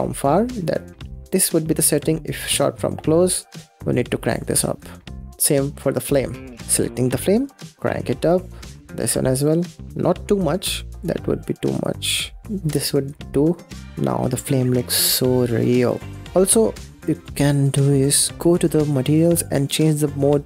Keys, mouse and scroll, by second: 0.4-2.4 middle drag, 2.4-2.9 scroll up 9, 2.9-3.9 shift+middle drag, 3.9-5.3 drag, 5.3 scroll down 1, 5.7-6.3 scroll up 3, 6.3 click, 6.6-7.2 scroll down 4, 7.2-7.7 scroll up 5, 7.7-11.1 drag, 11.7-13.0 drag, 13.3-14.8 scroll down 1, 14.8-16.2 middle drag, 16.2-16.6 scroll down 1, 16.6-17.1 scroll up 3, 18.6 click, 19.7-20.4 drag.